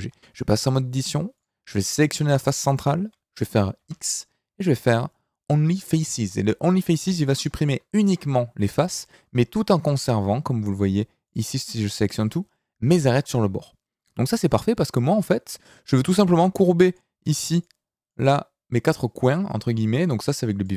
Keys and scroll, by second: 0.1 Tab, 3.8 x, 11.6 a, 16.0 d.